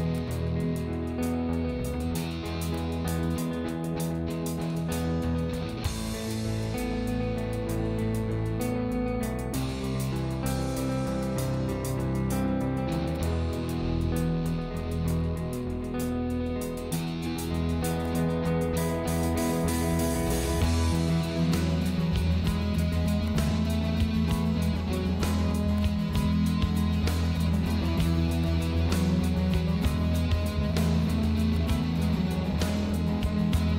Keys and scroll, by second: 6.9 ctrl+g, 8.1 l, 22.0 m, 26.4 ctrl+[.